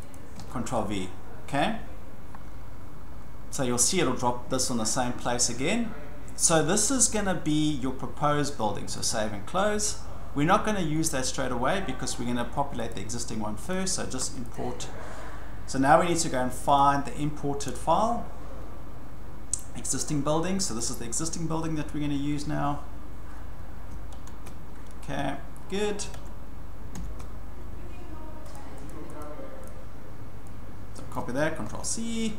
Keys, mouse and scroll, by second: 0.1 click, 0.4 ctrl+v, 9.1-10.2 drag, 12.9 click, 13.7 click, 14.5 click, 16.8 click, 20.8 click, 24.1 alt+Tab, 26.1 alt+Tab, 26.9 alt+Tab, 28.5 click, 28.9 click, 29.2 click, 29.7 click, 31.1 click, 31.6 ctrl+c.